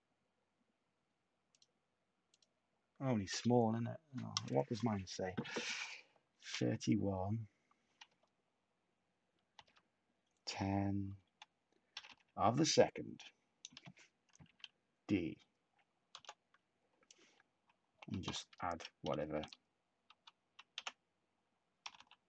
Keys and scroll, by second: 6.1-7.0 typing, 8.0 -, 9.3-10.0 typing, 11.0-12.4 typing, 14.4 d, 16.1 Return, 17.8-19.3 typing, 20.5-22.2 typing.